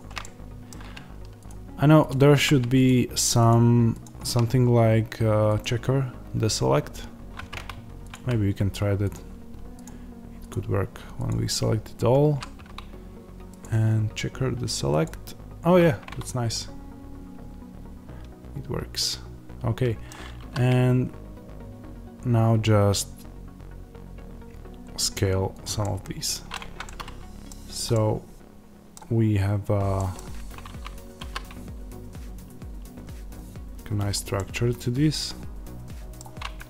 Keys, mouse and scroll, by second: 0.1-1.4 middle drag, 1.4 shift+click, 9.0 ctrl+click, 14.9-16.5 drag, 16.5-20.3 middle drag, 20.3 s, 25.5 click, 25.7 middle click, 26.5 Tab, 26.7 middle click, 27.4 scroll down 1, 27.8 middle click, 28.9-29.3 scroll down 1, 29.3-29.9 scroll up 1, 29.9 middle click, 30.3 Tab, 31.1 s, 34.0 click, 34.3 middle click.